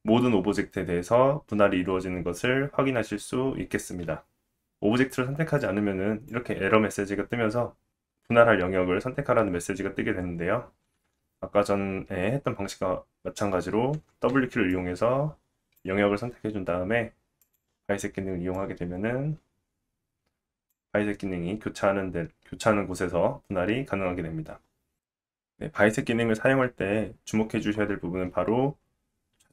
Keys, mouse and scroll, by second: 1.4-2.0 scroll down 3, 1.6 middle click, 4.6 click, 5.6 click, 11.0 w, 14.3 w, 14.7-24.8 drag, 24.8 Tab, 24.8-29.5 middle drag.